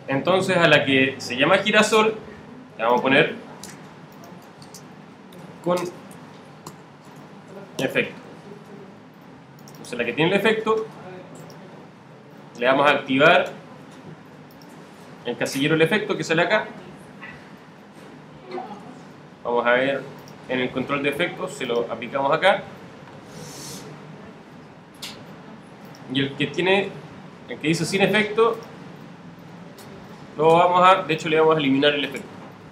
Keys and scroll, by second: 3.6 Return, 17.8 alt+super+-, 32.1 Delete.